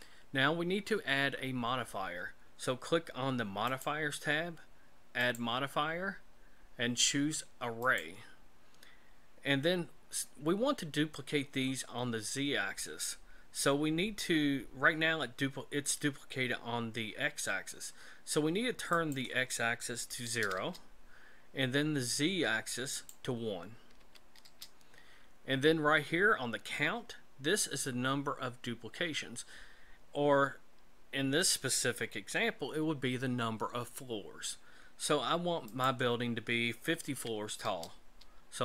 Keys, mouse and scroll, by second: 3.7 click, 5.2 click, 18.9 click, 22.9 click, 35.7 click.